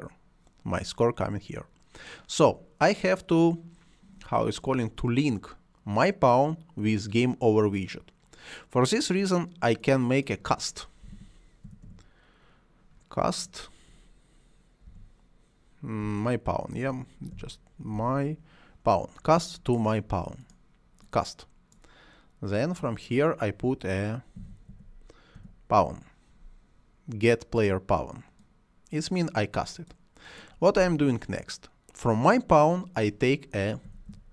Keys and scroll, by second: 11.0-12.3 typing, 14.9 m, 16.0 BackSpace, 17.3 m, 18.0 y, 24.4 p, 24.7 a, 25.4 w, 33.6-34.3 typing.